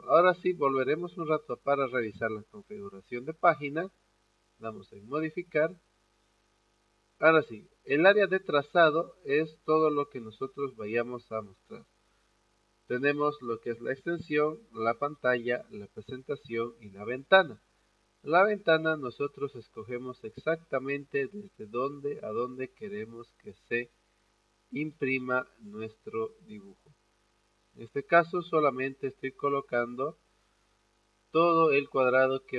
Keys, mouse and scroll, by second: 2.2 click, 4.6 click, 8.8 click, 17.3 click, 24.1 click, 28.4 click.